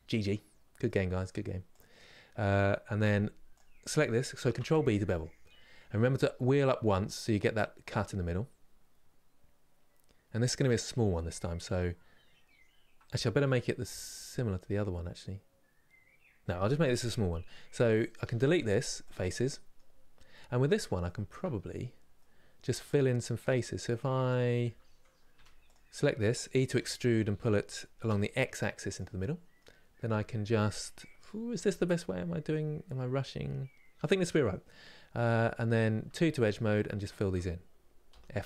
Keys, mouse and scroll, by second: 0.5 middle click, 1.4 click, 4.3 ctrl+b, 10.6-18.8 middle drag, 18.8 Delete, 19.0 middle click, 19.7-20.8 scroll up 2, 20.8 shift+middle click, 21.3-21.9 scroll up 2, 21.9-25.0 middle drag, 25.0 1, 28.9-35.7 middle drag, 35.7 2, 37.8 f.